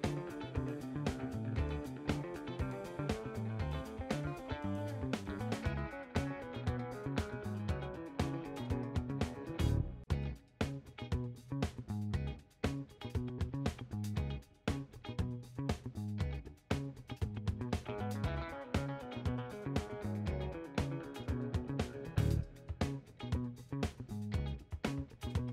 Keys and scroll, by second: 0.5 BackSpace, 0.5 2, 0.7 Return.